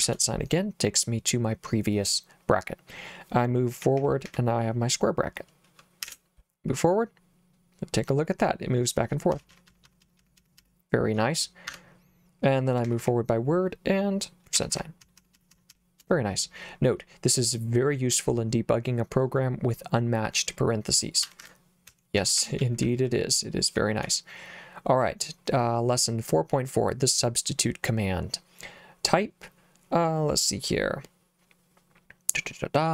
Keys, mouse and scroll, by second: 0.0 shift+5, 3.8 w, 4.3 w, 6.1 shift+5, 9.4-10.6 typing, 11.7 Escape, 12.9 w, 13.0 w, 14.6-15.7 typing, 21.3 Escape, 21.5 Escape, 21.9-22.9 typing, 24.0 j.